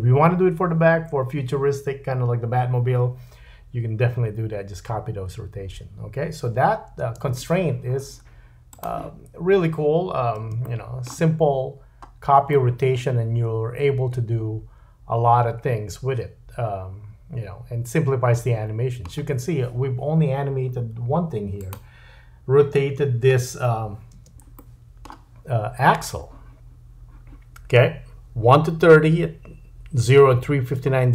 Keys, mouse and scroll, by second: 7.0 space, 8.7-12.5 drag, 10.7 shift+middle click, 11.4-12.5 scroll up 3, 12.5 middle click, 21.6 click, 21.8-23.1 middle drag, 23.0-24.2 scroll down 2, 24.2-24.6 scroll down 1, 24.2 space, 24.6 middle click.